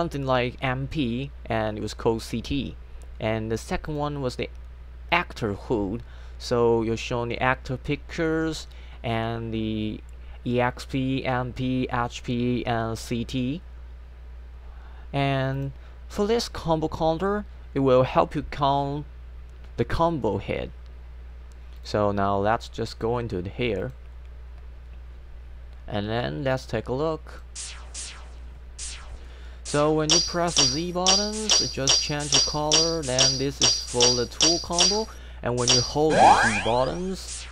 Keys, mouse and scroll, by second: 3.9 click, 15.6 click, 21.8 click, 22.9 click, 23.8 click, 26.5 click, 30.0-35.6 typing.